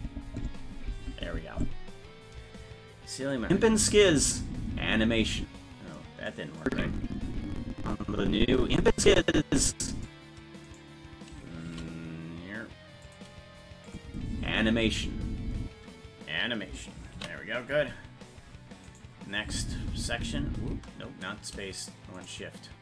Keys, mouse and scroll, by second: 3.4 space, 5.9 space, 6.6-10.1 drag, 10.7 right click, 11.7 shift+d, 13.9 click, 14.1 space, 17.6 ctrl+s, 18.9 right click, 19.4 space, 20.0 space, 22.3 shift+right click.